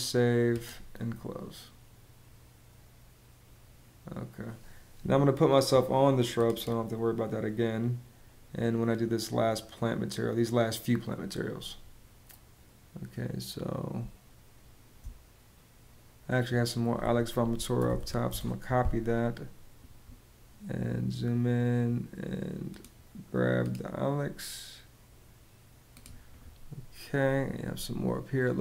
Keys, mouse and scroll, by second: 13.7 space, 17.2-18.1 typing.